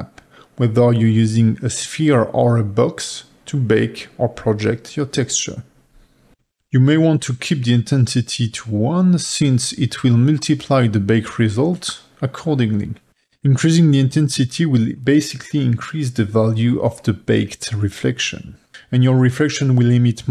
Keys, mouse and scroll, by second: 0.5-6.5 drag, 6.9-14.4 drag, 18.6-19.5 middle drag, 19.2-20.3 drag.